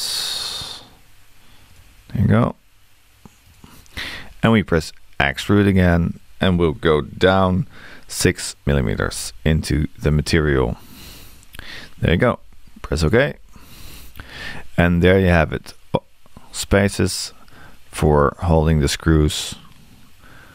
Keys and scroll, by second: 8.5-9.4 typing, 13.1 Return.